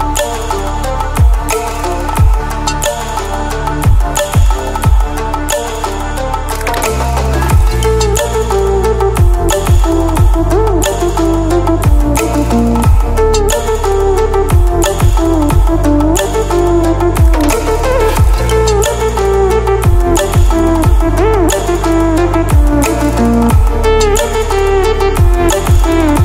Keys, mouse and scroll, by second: 6.8 ctrl+w, 12.5 ctrl+w, 14.9 ctrl+w, 22.2 ctrl+w, 22.8 click, 25.2-26.2 drag.